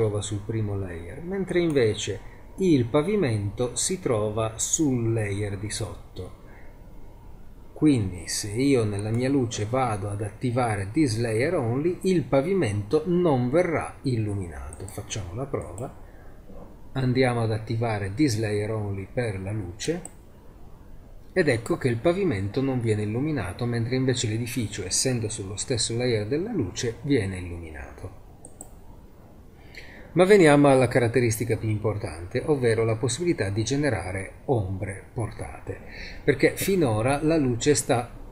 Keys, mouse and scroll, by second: 1.5-3.6 right drag, 9.0-10.9 right drag, 11.5-14.8 middle drag, 16.6-20.0 middle drag, 28.8 click, 30.3-38.3 middle drag.